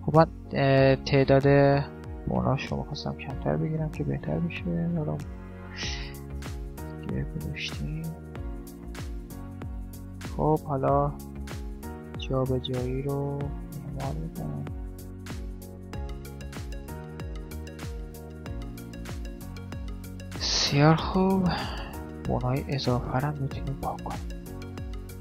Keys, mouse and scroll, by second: 2.8 r, 3.8 g, 5.0 r, 5.8 middle click, 7.1 KP_7, 7.6 middle click, 8.2-9.7 middle drag, 8.8 click, 9.4-13.5 right drag, 13.6 middle click, 14.4 click, 14.4 right click, 15.3 click, 15.4 middle click, 16.2 right click, 17.7 right click, 18.2 middle click, 19.0 right click, 20.9 middle click, 21.4 right click, 22.0 x, 22.7 right click, 22.8 x, 24.4 right click, 24.6-25.2 middle drag.